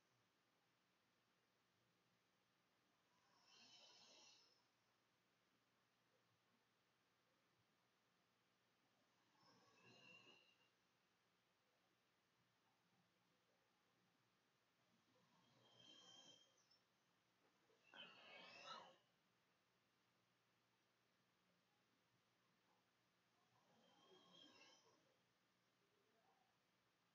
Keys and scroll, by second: 8.7 ctrl+x, 9.3 ctrl+c, 9.6-10.4 typing, 12.8-13.7 typing, 14.8 ctrl+space, 15.5 ctrl+b, 16.1 ctrl+v, 18.9 g, 21.6-27.1 typing.